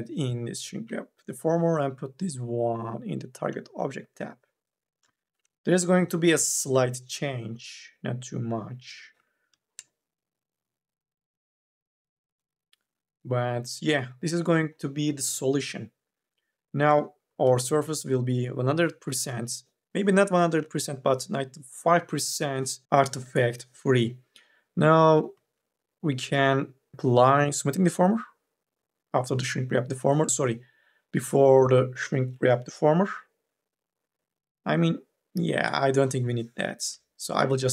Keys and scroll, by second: 4.8 n, 5.2 b, 9.2 2, 17.1 4, 17.3 e, 25.5 ctrl+z, 36.7 Delete.